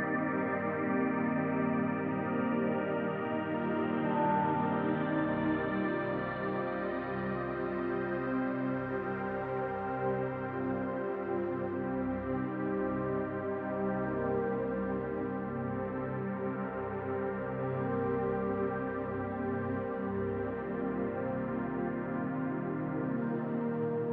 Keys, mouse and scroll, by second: 0.4 middle click, 1.5 shift+click, 2.0 shift+click, 2.8 shift+click, 3.0 middle click, 3.9 click, 6.5 middle click, 7.2-7.7 scroll down 1, 7.7 Tab, 7.7-8.2 scroll down 3, 8.3 middle click, 10.9 scroll down 2, 11.2 shift+middle click, 11.7 middle click, 12.3 shift+middle click, 12.8 click, 13.1 middle click, 14.3 click, 15.0 middle click, 16.1 click, 17.1 middle click, 18.3 s, 19.5 click, 20.8 click, 21.1 middle click, 22.0 click, 23.0 click.